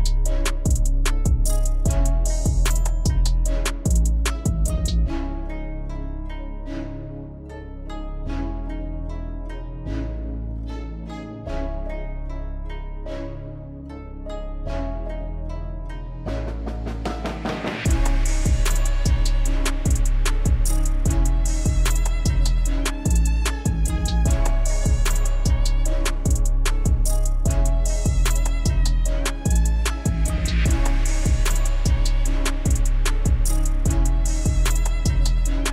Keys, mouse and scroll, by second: 1.5-2.2 typing, 1.7 click, 9.1 click, 11.9 alt+click, 17.4 shift+click, 21.3 click, 26.7-27.3 drag.